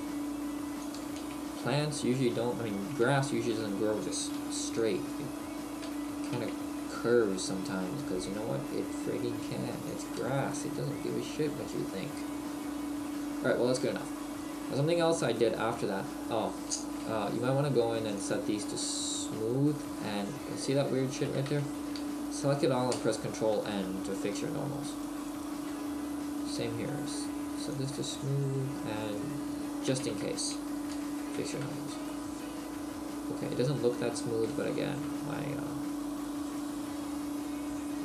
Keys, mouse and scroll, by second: 1.0 ctrl+click, 1.2 ctrl+z, 2.3 Tab, 3.2 Tab, 3.6 a, 4.4 b, 10.1 click, 10.2 Tab, 10.5 middle click, 12.1 middle click, 12.7-13.1 scroll down 2, 13.1 middle click, 15.1-15.4 scroll up 2, 15.4 shift+middle click, 18.2 click, 18.2 t, 20.2 Tab, 21.3 a, 23.0 ctrl+n, 23.0 a, 23.7 Tab, 24.9 right click, 25.7 Tab, 27.7 click, 29.1 right click, 29.6 Tab, 31.0 ctrl+n, 31.6 Tab, 32.1 middle click, 36.7 right click.